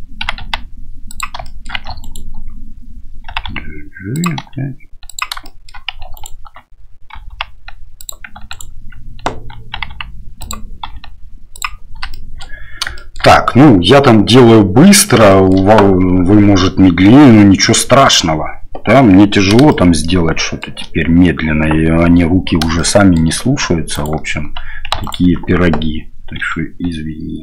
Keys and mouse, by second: 0.2 g, 1.6 shift+middle click, 2.0 alt+click, 4.4 r, 5.4 shift+middle click, 6.2 alt+right click, 7.1 g, 8.5 alt+right click, 9.7 g, 10.8 r, 12.1 shift+middle click, 12.9 shift+middle click, 15.3 shift+middle click, 19.7 shift+middle click, 22.8 shift+middle click, 23.9 alt+right click, 25.0 alt+right click, 26.4 r.